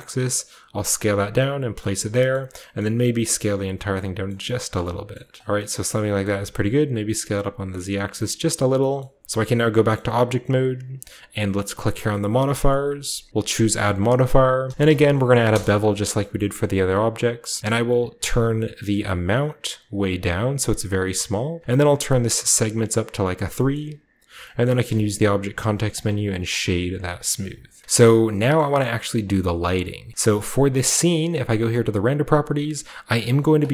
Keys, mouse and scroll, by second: 1.0 click, 1.2-2.6 scroll down 2, 1.7 middle click, 1.8 a, 2.0 a, 2.3 middle click, 2.6 scroll up 1, 2.7 middle click, 3.2 typing, 3.7 click, 4.1-4.6 scroll up 1, 5.2 typing, 5.4 middle click, 5.4-6.2 scroll down 1, 6.2 scroll up 1, 6.4-7.9 middle drag, 6.4 typing, 7.9 click, 8.6 middle click, 8.6-9.2 scroll down 1, 9.2-10.6 scroll up 1, 9.2-10.0 typing, 10.6-11.9 scroll up 1, 10.7-12.0 middle drag, 11.9-14.6 drag, 11.9 scroll up 1, 14.3-15.1 typing, 15.4 Return, 16.3-17.1 typing, 16.5 shift+middle click, 16.5-17.6 shift+scroll up 1, 17.6-18.1 scroll up 1, 18.9-21.4 shift+drag, 22.4 click, 22.9 click, 23.7 middle click, 24.6 middle click, 24.8 w, 25.8 click, 26.5 a, 26.7-27.1 scroll down 2, 27.6 scroll down 1, 27.6 typing, 27.8-28.3 shift+middle drag, 27.8 scroll up 1, 28.5 middle drag, 28.9-30.7 middle drag, 30.9 click, 32.1 drag, 33.5 click.